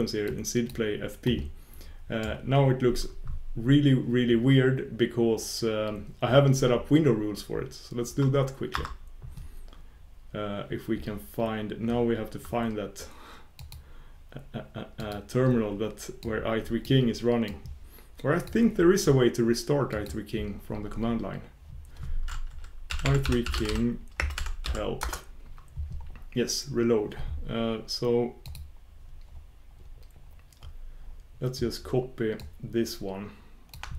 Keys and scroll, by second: 16.3 ctrl+super+Return.